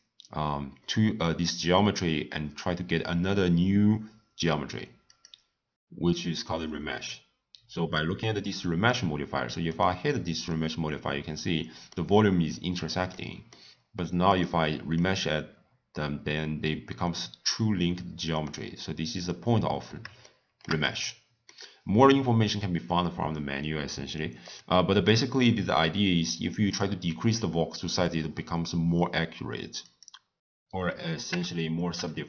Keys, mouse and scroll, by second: 0.8-3.8 middle drag, 5.1 click, 6.1-9.1 middle drag, 9.7 click, 10.5-14.3 middle drag, 14.3 click, 14.9-18.0 middle drag, 19.1 click, 20.2-23.8 shift+middle drag, 24.4 click, 26.7-29.8 drag.